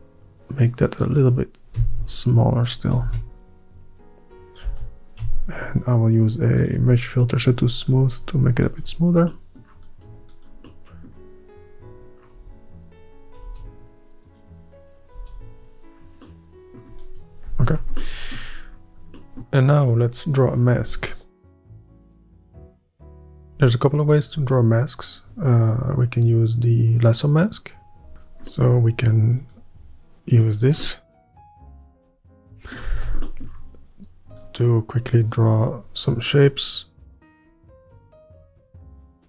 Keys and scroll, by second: 1.9 r, 3.1 ctrl+r, 4.7 space, 5.3-6.9 space, 13.6 Tab, 15.2 Tab, 23.4-27.5 space, 27.6 ctrl+z, 33.0 ctrl+z, 38.7 ctrl+z.